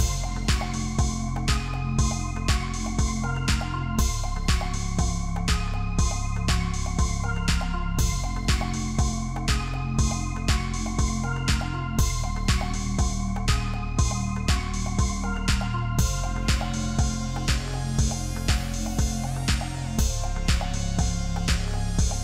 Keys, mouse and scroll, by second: 1.4 ctrl+t, 2.6 shift+click, 5.5 ctrl+t, 13.8 shift+click, 19.8 Return.